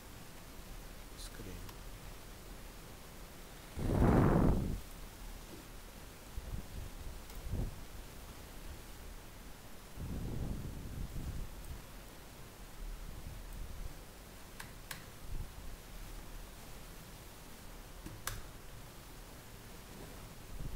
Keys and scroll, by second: 2.2 ctrl+s, 8.5 alt+Tab, 17.3 ctrl+x.